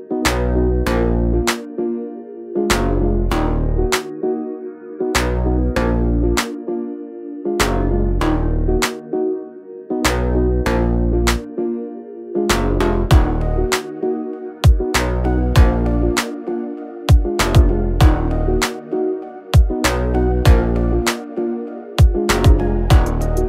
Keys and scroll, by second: 0.1 space, 0.2 Escape, 3.4 l, 6.1 Escape, 8.2 space, 8.7 e, 9.5 space, 10.9-12.7 typing, 14.7 space, 14.9 l, 15.7 space, 16.1 l, 18.1 space, 18.6 e, 21.8 l.